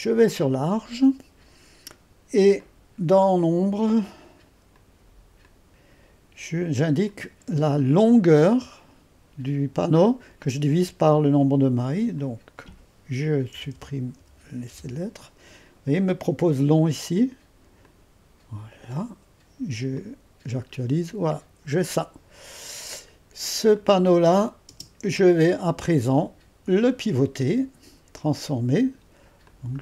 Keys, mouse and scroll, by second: 5.4-10.3 drag, 12.1-13.5 drag, 13.5 BackSpace, 13.7 BackSpace, 14.1 BackSpace, 14.7 BackSpace, 16.8 click, 17.8-19.0 drag, 19.9-23.1 drag, 23.7-24.7 drag, 24.7 space, 25.8 click, 26.7-29.8 drag.